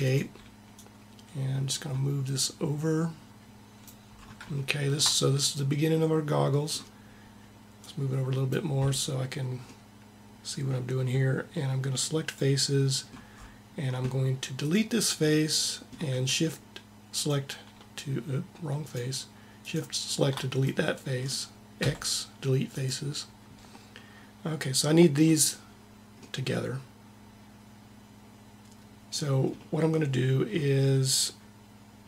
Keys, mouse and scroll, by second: 3.9 middle click, 7.6 click, 12.1-13.3 drag, 13.2 middle click, 21.7 x, 29.7-30.9 middle drag.